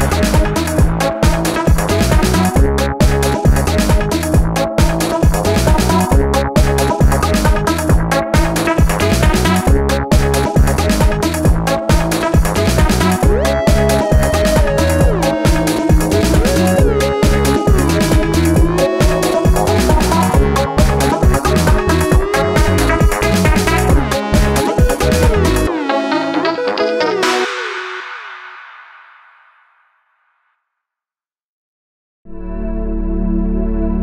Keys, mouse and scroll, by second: 0.7-1.2 alt+scroll down 1, 1.3 alt+scroll up 1, 2.9 alt+scroll up 1, 9.5 alt+shift+click, 18.7 alt+scroll down 1, 19.5-19.8 alt+scroll up 1, 21.6 alt+scroll up 1, 24.0 ctrl+z, 33.7 shift+click.